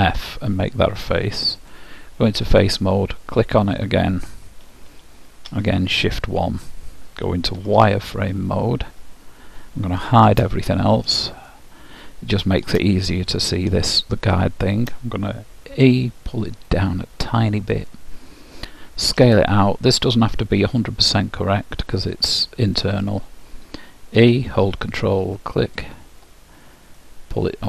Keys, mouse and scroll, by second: 1.6-4.5 drag, 7.6 z, 10.2 shift+h, 11.5-15.7 middle drag, 15.9 e, 19.2 s, 24.3 e, 27.0-27.6 middle drag.